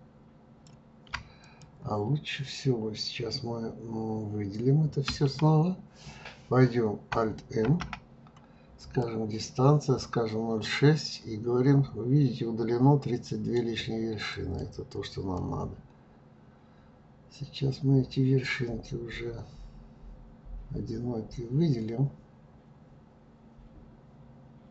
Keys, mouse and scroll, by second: 1.4 click, 5.0 a, 7.6 alt+m, 14.3 click, 15.3-18.3 drag.